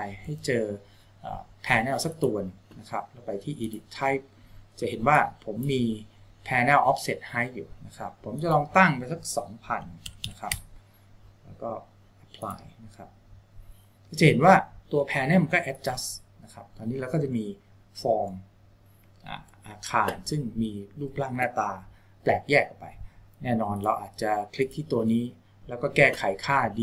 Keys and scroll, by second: 0.6 Tab, 10.1 KP_0.